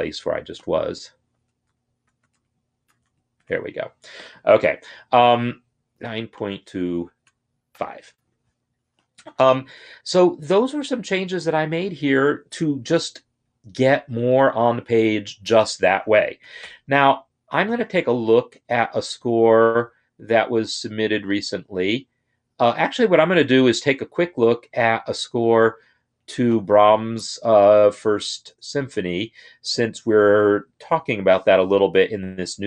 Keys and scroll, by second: 1.4 ctrl+z, 2.1 ctrl+z, 2.8 ctrl+shift+z, 6.9 shift+Left, 7.5 5, 16.3 ctrl+o.